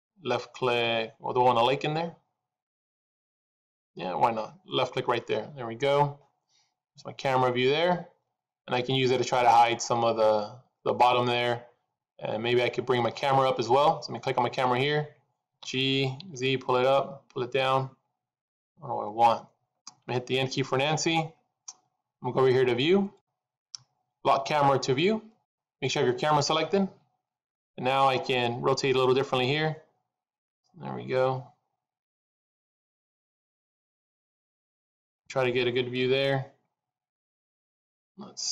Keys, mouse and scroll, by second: 5.8-6.4 scroll up 2, 10.4-13.4 scroll down 2, 14.2 click, 15.4 g, 20.5 n, 22.9 click, 25.2 click, 27.9 middle click.